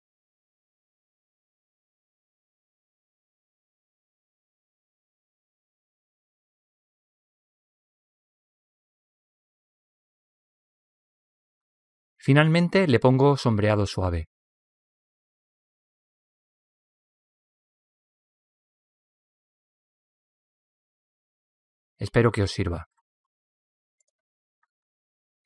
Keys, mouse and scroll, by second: 1.7 s, 6.2 middle click, 7.1 middle click, 10.2 middle click, 11.0 a, 11.4 a, 13.3-18.1 drag, 17.8 Tab, 18.3 middle click, 19.3 middle click, 19.8-24.9 drag.